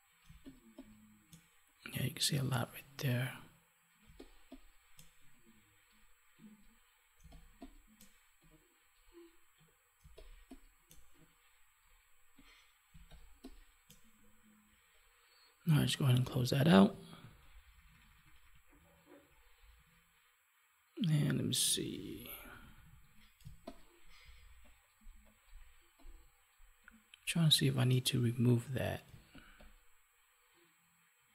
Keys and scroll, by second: 4.0 space, 7.1 space, 10.0 space, 12.8 space, 17.1 ctrl+-, 21.6 ctrl+=, 23.4 space, 29.0 space.